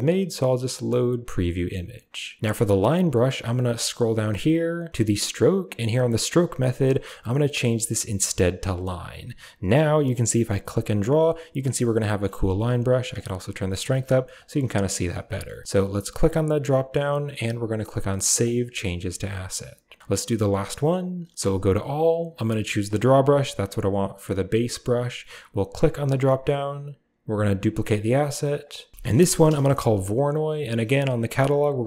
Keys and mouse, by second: 0.8 click, 6.3-8.8 drag, 9.8 f, 10.7 click, 11.8 middle click, 12.4 ctrl+z, 13.1 click, 14.3 click, 15.2 middle click, 15.6 ctrl+z, 16.3-18.5 drag, 22.9 click, 25.9 click, 26.6-31.8 drag.